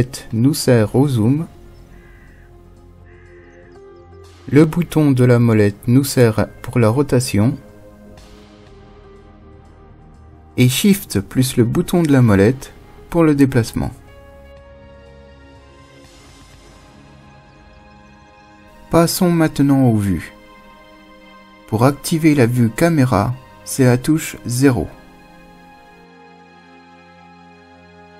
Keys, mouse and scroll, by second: 0.0 scroll up 1, 0.1-1.2 middle drag, 1.2 scroll, 5.9-8.9 middle drag, 10.8-13.8 shift+middle drag, 21.2 KP_0.